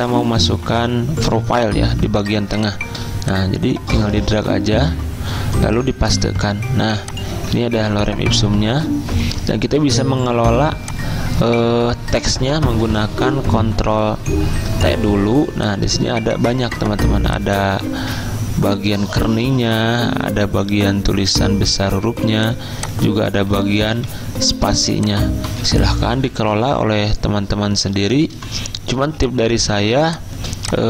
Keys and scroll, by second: 6.1 ctrl+v, 7.7 ctrl+a, 13.4 ctrl+t, 14.1 ctrl+t, 25.6 z, 28.4 v, 29.1 z.